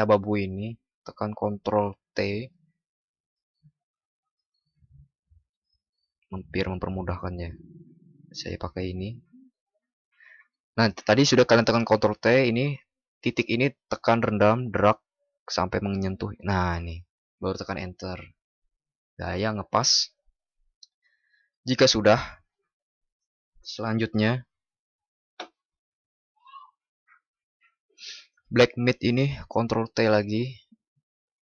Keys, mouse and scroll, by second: 2.0 ctrl+t, 29.9 ctrl+t.